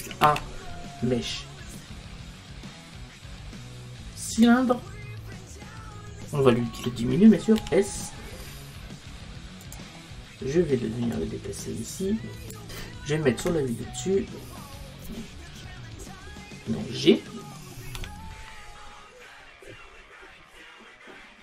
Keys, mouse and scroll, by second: 5.3-7.4 middle drag, 7.6 s, 11.2 click, 13.4 KP_7, 16.1-18.1 middle drag, 18.0 g.